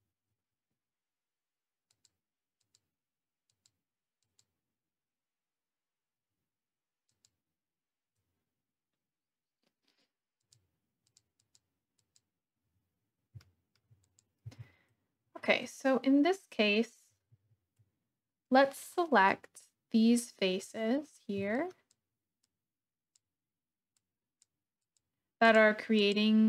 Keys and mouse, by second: 1.9 click, 2.5 click, 3.6 click, 4.3 click, 7.0 click, 10.4 click, 11.0 click, 11.4 click, 11.9 click, 13.4 shift+click, 13.8 shift+middle click, 14.4 Tab, 17.3 alt+z, 19.6-20.6 drag, 21.5 shift+click, 22.4 shift+click, 24.0 shift+click, 24.8 shift+click, 25.4 shift+click, 25.9 click.